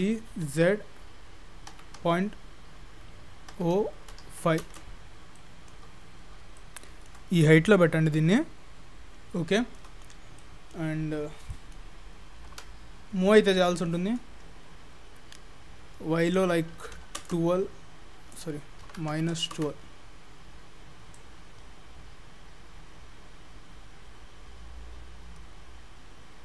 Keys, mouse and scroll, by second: 0.0 g, 5.3-5.9 scroll down 4, 5.9 middle click, 5.9-6.6 scroll up 8, 6.6 shift+middle click, 7.3 scroll up 2, 7.5 shift+middle click, 10.0-10.4 scroll down 5, 10.4 middle click, 10.9-12.5 scroll down 5, 11.5 middle click, 12.5 KP_7, 13.3 scroll up 3, 13.7 shift+middle click, 16.3 click, 18.3 click, 21.2 click.